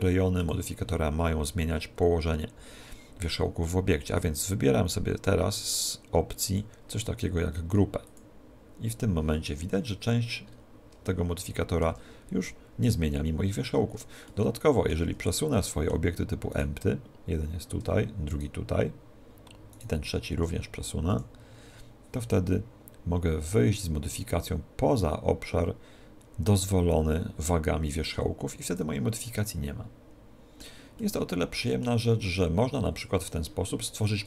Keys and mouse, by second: 0.5 click, 6.7 click, 9.8-12.9 middle drag, 15.1 z, 17.2-21.6 right drag, 22.9 click, 29.5-34.2 middle drag.